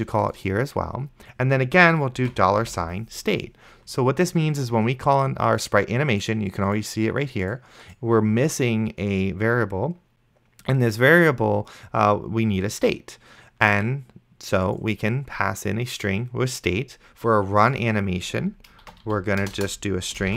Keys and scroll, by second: 0.0 ctrl+c, 2.9 ctrl+v, 19.1-20.3 typing.